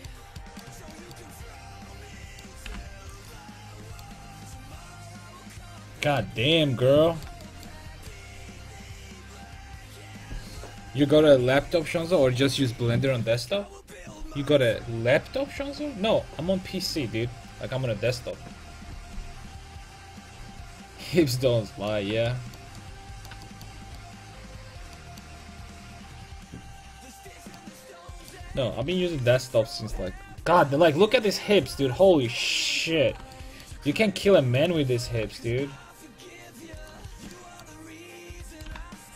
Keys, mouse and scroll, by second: 0.0 middle click, 1.2 click, 1.7-3.7 right drag, 2.7 g, 3.4 a, 4.2 Tab, 9.2 middle click, 21.2-23.4 middle drag, 25.4 Tab, 28.1-29.2 middle drag, 29.1 KP_5, 29.2 KP_1, 32.3 middle click, 34.7 right click, 35.1 g, 37.1 a, 38.6 right click, 38.8 g.